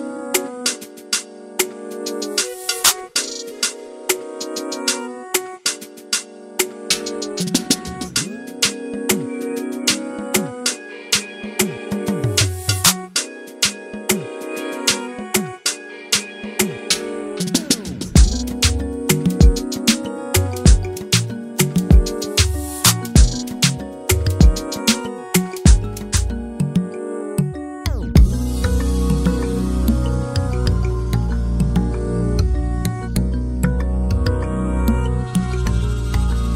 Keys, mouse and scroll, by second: 2.0 middle click, 2.2 scroll up 1, 2.5 alt+e, 4.7 scroll down 1, 4.7 middle click, 5.2 ctrl+r, 6.2 s, 8.2 scroll down 1, 8.3 scroll up 1, 8.4 Tab, 8.6 alt+a, 9.1 /, 9.4 drag, 9.6 Tab, 9.7 scroll up 1, 9.8 middle click, 9.9 scroll down 3, 10.2 middle click, 10.4 Tab, 10.5 alt+a, 10.6 middle click, 10.8 scroll down 1, 10.9 click, 11.8 click, 11.9 scroll up 1, 12.0 scroll down 1, 12.3-13.6 drag, 13.7 alt+a, 13.7 scroll down 3, 13.9 shift+middle click, 14.0 scroll up 1, 14.1-14.6 middle drag, 14.6 scroll down 1, 14.7 scroll up 1, 14.8-15.6 middle drag, 15.6 scroll down 1, 15.8 KP_1, 16.0 scroll up 2, 16.2 shift+middle click, 16.3 click, 17.1 click, 17.2-17.8 scroll up 2, 17.8 Tab, 18.2 ctrl+r, 18.8 s, 20.4 ctrl+r, 20.7-21.0 scroll down 2, 20.8 Tab, 20.9 alt+a, 21.0 scroll up 4, 21.1 middle click, 21.3-21.6 scroll down 3, 21.4 shift+middle click, 21.6-22.1 middle drag, 22.1 click, 22.3 s, 23.1 scroll down 3, 23.3 alt+a, 23.4 shift+middle click, 23.5 scroll up 3, 23.6-24.4 middle drag, 25.2-25.5 scroll down 1, 25.5 KP_4, 25.9 KP_1, 26.1-26.9 scroll up 3, 26.2 shift+middle click, 26.4 click, 26.5 shift+middle click, 26.9 Tab, 27.3 click, 27.8 3, 27.9 click, 28.7 shift+d, 30.5 Tab, 30.6 alt+a, 30.7-31.2 scroll down 10, 31.2 shift+middle click, 31.2-31.9 scroll up 5, 31.9 shift+middle click, 32.3 scroll down 1, 32.4 shift+middle click, 32.8 click, 33.0 Tab, 33.4 ctrl+r, 34.1 s, 35.1 Tab, 35.2 alt+a, 35.3-35.8 scroll down 4, 35.4 middle click, 35.8 shift+middle click, 35.9 scroll up 1, 35.9 middle click, 36.4 scroll down 1.